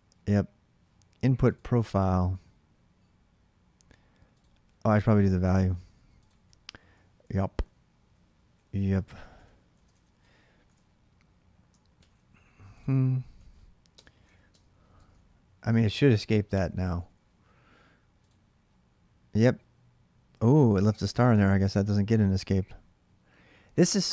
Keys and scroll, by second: 5.2 alt+Tab, 7.0 ctrl+[, 7.1 ctrl+j, 7.3-10.2 typing, 10.4 alt+Tab, 11.7 ctrl+r, 12.8-17.2 typing.